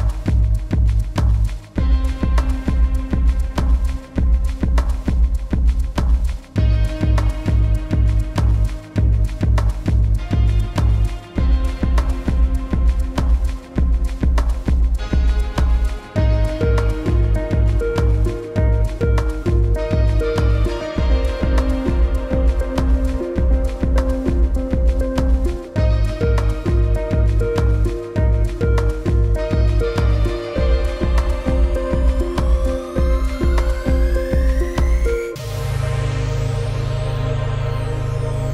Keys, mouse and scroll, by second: 9.0 click, 14.7 u, 15.1 click, 18.8 click, 21.0 click, 28.6 click, 31.4 click, 36.5 u, 37.7 click.